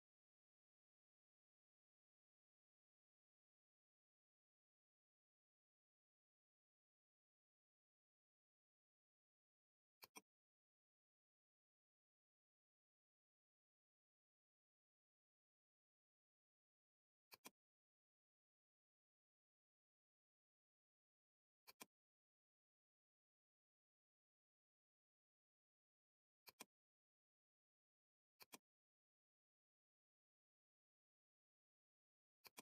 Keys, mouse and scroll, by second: 10.0-16.9 drag, 17.3-21.7 drag, 21.7-25.3 drag, 25.3 ], 25.7 ], 26.1 ], 26.5 click, 26.5 click, 27.6 ], 28.0 ], 28.4 click, 28.4 [, 28.4-32.6 drag.